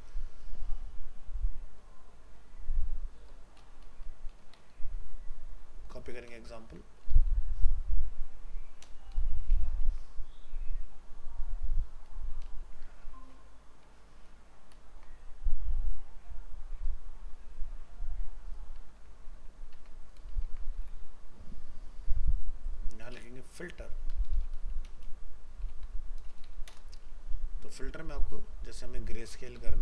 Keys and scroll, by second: 6.7 ctrl+c, 9.5 ctrl+v, 9.9 ctrl+s, 14.0 ctrl+z, 20.4 ctrl+s.